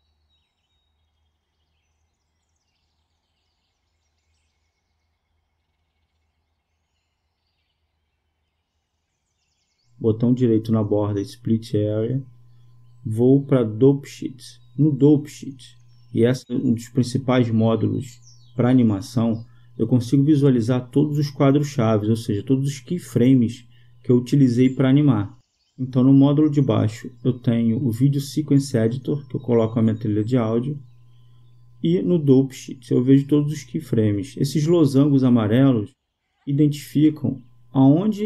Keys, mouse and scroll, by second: 6.7-8.7 drag, 13.2 click, 16.3-18.0 drag.